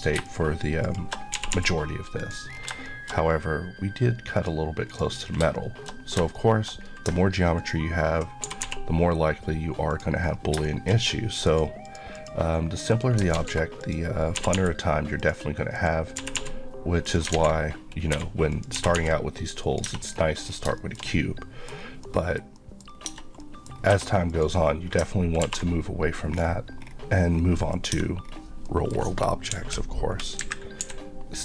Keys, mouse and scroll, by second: 0.3 shift+click, 0.8 shift+Left, 1.4 g, 2.2 click, 2.6 scroll down 2, 2.9 shift+middle click, 3.3-4.4 scroll up 1, 4.4 click, 5.3 scroll down 2, 5.6 shift+middle click, 6.3 shift+middle click, 6.8-7.6 scroll up 2, 7.6 ctrl+click, 8.4 typing, 9.9 click, 10.3 scroll up 1, 10.7 shift+middle click, 11.0 scroll up 1, 11.4 click, 13.4 z, 13.8 click, 14.4 typing, 15.2 click, 16.2 g, 17.1 click, 17.3 alt+z, 17.7-18.1 scroll down 1, 18.2-19.0 typing, 18.5 click, 19.6 click, 19.9 Tab, 20.0 scroll down 1, 20.7 shift+scroll down 1, 20.8 shift+middle click, 21.8 scroll down 1, 22.0 middle click, 22.9 scroll up 1, 23.1 Tab, 23.4 middle click, 23.7 scroll up 1, 23.9 2, 24.3 click, 25.5 ctrl+b, 26.3-26.8 scroll down 1, 27.3-27.7 scroll down 1, 27.7 click, 27.9 Tab, 28.3-28.7 scroll down 1, 28.7 middle click, 29.5 KP_1, 30.4 KP_3, 30.8 d.